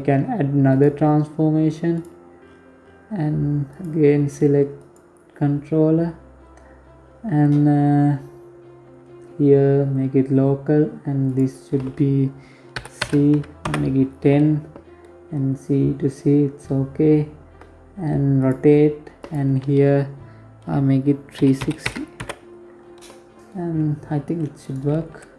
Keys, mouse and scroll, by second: 0.9-2.2 scroll down 11, 2.2 click, 3.9-4.4 scroll down 2, 4.4-5.2 scroll up 3, 5.5-6.2 scroll down 2, 9.7 click, 12.8-13.5 scroll down 2, 15.3-16.8 scroll down 3, 16.8 click, 17.6 click, 23.0 right click, 23.3 g, 25.1 right click.